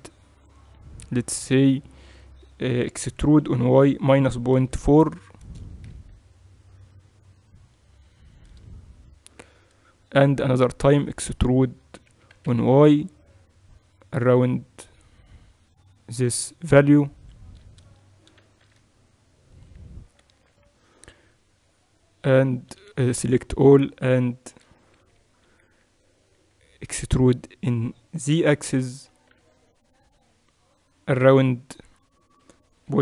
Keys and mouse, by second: 3.3 e, 12.2 e, 22.7 a, 22.9 a, 24.9-26.3 typing, 28.3 e.